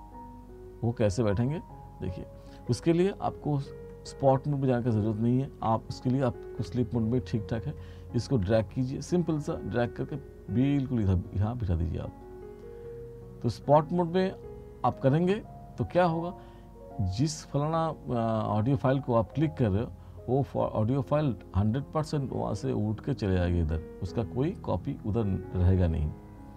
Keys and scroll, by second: 6.6 F2.